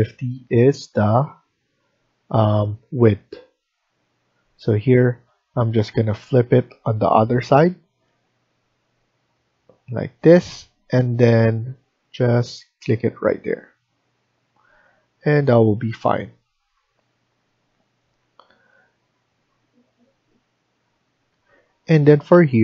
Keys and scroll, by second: 14.8 Escape, 15.2 Escape, 21.2 F1.